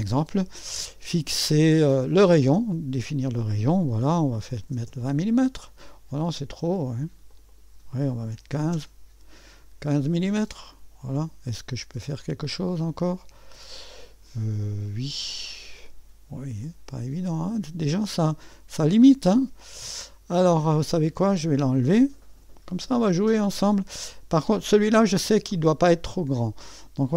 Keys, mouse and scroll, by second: 2.1 click, 4.1-5.1 typing, 7.3-8.4 drag, 8.1-9.1 typing, 12.0-20.7 drag, 21.5 click, 22.3 Delete, 25.6-27.1 drag.